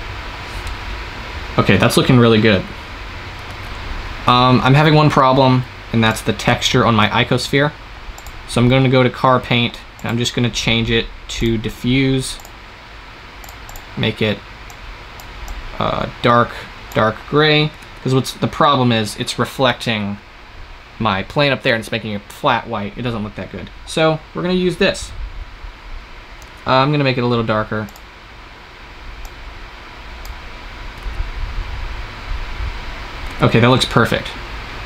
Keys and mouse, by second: 4.2 shift+z, 6.9-13.4 drag, 17.7 shift+z, 27.6 shift+z, 30.9 shift+z, 34.1 shift+z.